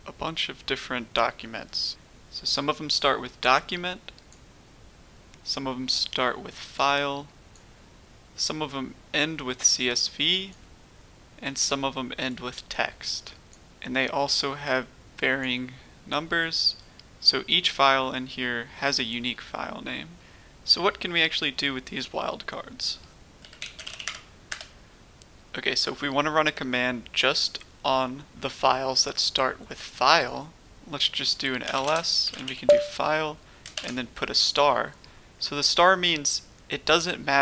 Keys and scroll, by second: 23.3-23.9 typing, 24.0 Tab, 24.4 Return, 31.6-32.4 typing, 33.7 typing.